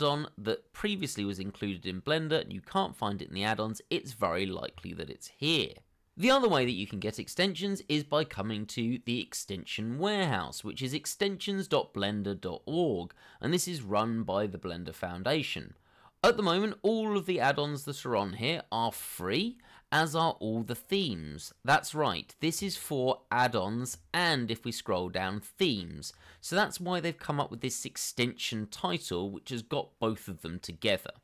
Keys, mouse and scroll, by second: 5.6 scroll down 1, 16.4 scroll down 1, 17.9 scroll down 1, 18.8 scroll up 1, 19.3 scroll up 1, 23.5 scroll down 1, 24.4 scroll down 1, 24.7 scroll up 1.